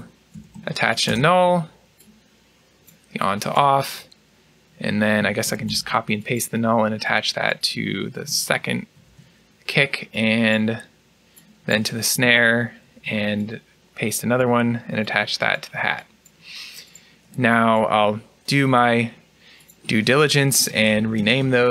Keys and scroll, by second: 5.3 ctrl+c, 5.3 typing, 5.6 ctrl+v, 8.5 ctrl+c, 12.1 ctrl+v, 12.7 ctrl+v, 20.3 BackSpace.